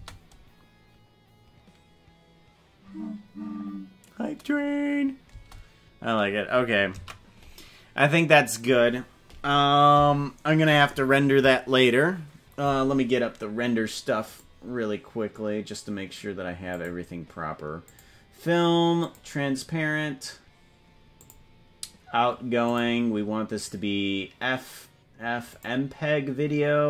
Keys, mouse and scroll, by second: 5.3 space, 7.5 ctrl+s, 14.2 click, 16.8 click, 17.8 click, 19.0 click, 21.2 click, 22.8-25.8 drag.